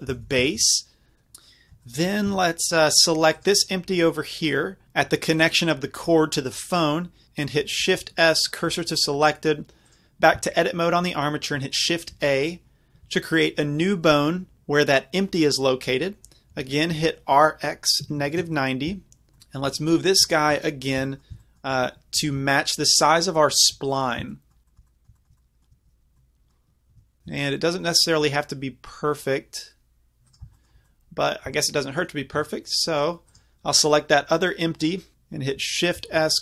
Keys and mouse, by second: 2.3 Tab, 7.2 shift+a, 7.9 shift+s, 10.4 Tab, 12.2 shift+a, 16.6 r, 19.4-23.6 middle drag, 22.2 g, 23.7-25.1 drag, 25.2-25.6 middle drag, 26.9 g, 30.3 click, 30.6-31.3 middle drag, 32.3 Tab, 36.0 shift+s.